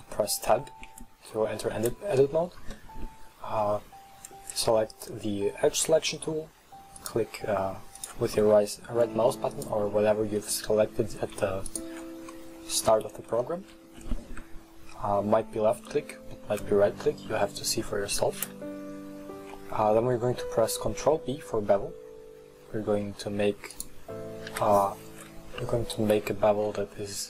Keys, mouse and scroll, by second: 0.6 Tab, 1.4-5.0 middle drag, 5.0 click, 6.2 middle click, 7.0 right click, 8.0 shift+right click, 8.4-9.6 middle drag, 9.6 shift+right click, 10.5-11.8 middle drag, 11.8 shift+right click, 12.4-16.5 middle drag, 18.5 ctrl+b, 24.6 KP_1, 26.3 ctrl+b.